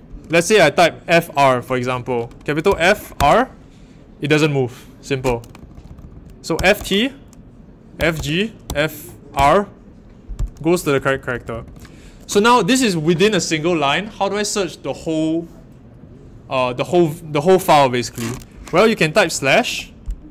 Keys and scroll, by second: 2.4-3.6 typing, 5.3-9.8 typing, 10.9-11.6 typing, 19.5 /.